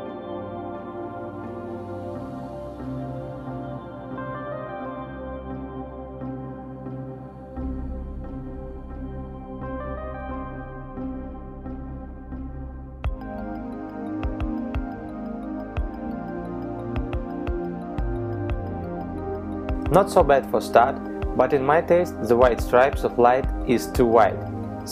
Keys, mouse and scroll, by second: 1.2 click, 2.3 click, 5.9 middle click, 8.2 KP_0.